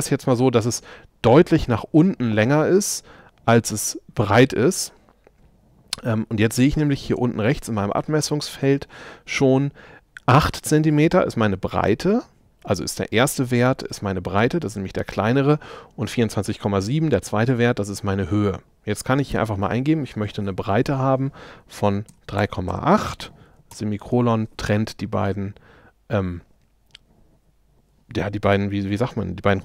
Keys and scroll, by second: 22.1 3, 22.4 ,.